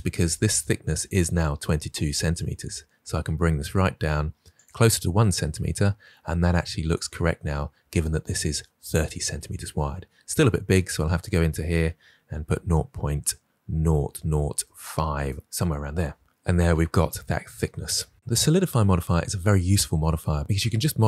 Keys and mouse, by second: 2.3-3.7 drag, 4.5 click, 10.4-15.1 drag.